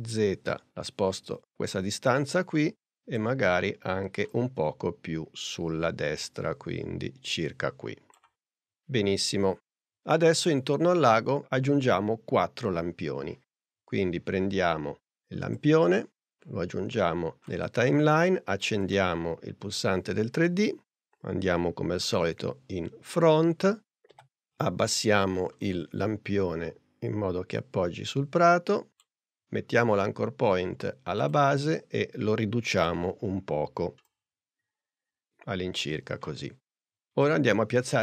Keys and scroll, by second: 24.1 p, 32.8 s.